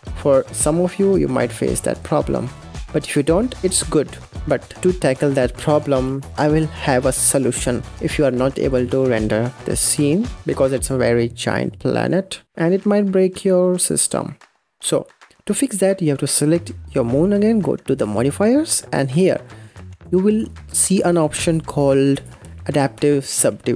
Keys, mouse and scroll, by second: 4.5 click, 5.4-7.7 drag, 8.5-12.4 drag, 15.0 scroll down 4, 15.4 click, 17.8 click, 20.9-23.7 drag.